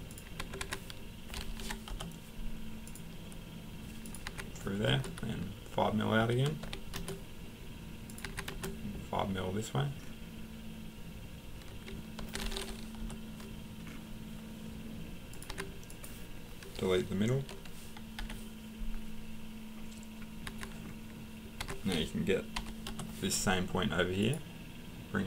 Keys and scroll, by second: 0.4 Escape, 0.6 Escape, 1.6 typing, 1.9 Return, 4.3 Escape, 6.6 5, 8.2 Escape, 12.2 5, 13.0 Return, 15.5 Escape, 18.2 Delete, 20.5 Escape, 21.6 Escape, 22.9 Return.